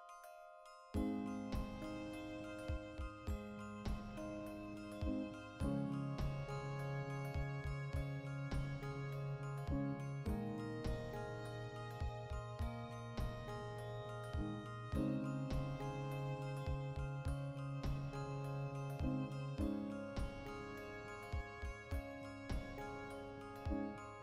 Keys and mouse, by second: 0.2 alt+q, 0.8 g, 1.3 click, 1.4-2.8 middle drag, 1.7 g, 2.8 shift+click, 2.9 middle click, 3.1 Tab, 3.3 right click, 3.7 alt+q, 4.1 ctrl+middle click, 4.5 shift+right click, 5.2 alt+q, 5.4 ctrl+shift+middle click, 6.0 click, 6.5 ., 7.3 r, 8.3 click, 8.4-10.6 shift+middle drag, 9.6 alt+q, 10.1 r, 10.6 click, 11.0 a, 11.3-12.8 middle drag, 12.8 right click, 13.0-14.9 middle drag, 14.9 right click, 15.2 shift+middle click, 15.4 right click, 15.7 middle click, 16.3 Tab, 16.7 right click, 17.1 l, 17.3 middle click, 17.8 Tab, 18.0-20.0 shift+right drag, 20.0 \, 20.5 right click, 20.8 KP_Decimal, 21.0 middle click, 21.8 click, 22.3 KP_Decimal, 22.5-24.2 middle drag, 23.0 Tab.